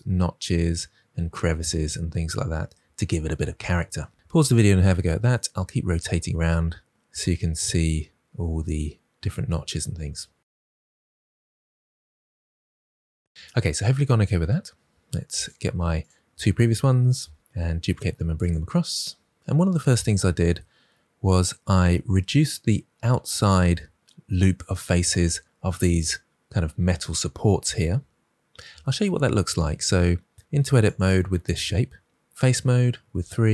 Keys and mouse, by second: 15.4 click, 16.4 shift+d, 16.7 x, 17.9-18.3 drag, 31.4 Tab, 32.1 3.